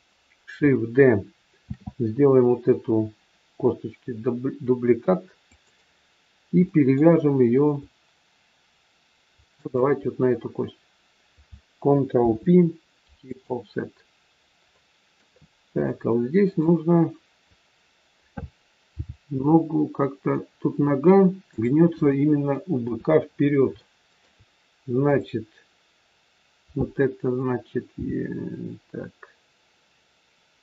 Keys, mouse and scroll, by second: 1.6 shift+d, 6.6 middle click, 9.6 shift+click, 12.2 ctrl+p, 14.7 middle click, 16.3 click, 19.0 g, 22.0 middle click, 22.7 KP_3, 23.3 scroll up 2, 23.7 shift+middle click, 25.1 click, 27.8 e.